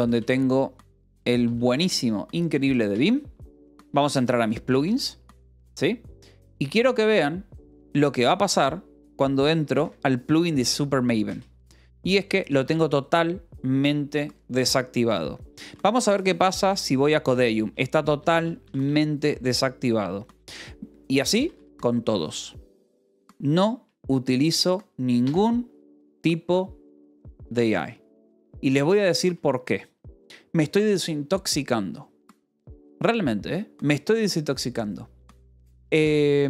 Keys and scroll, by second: 0.0-0.5 typing, 1.8 space, 2.9 Return, 3.2 n, 3.6 i, 3.7 Return, 4.6 space, 8.4 Down, 8.9-13.4 typing, 11.2 Return, 15.5-17.1 typing, 18.1 g, 19.1 shift+g, 19.1 Escape, 21.4 space, 25.2 Escape, 28.8 k.